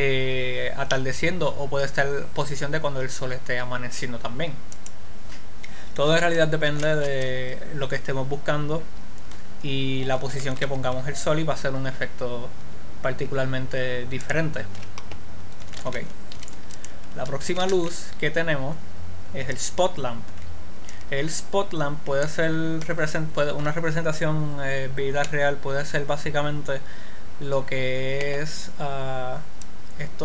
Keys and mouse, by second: 5.5-7.2 drag, 7.2 alt+r, 10.9 r, 16.3 a, 16.5 a, 16.8 x, 18.1 shift+a, 24.2-27.6 middle drag, 30.1-30.2 drag.